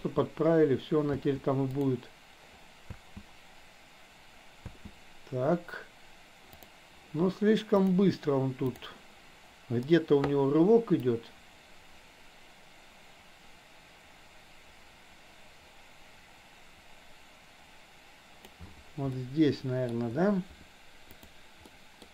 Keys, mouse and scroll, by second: 1.6 space, 1.7 click, 7.8-8.9 drag, 11.1-18.6 drag, 19.1-19.9 middle drag, 21.1 click, 21.7 middle click.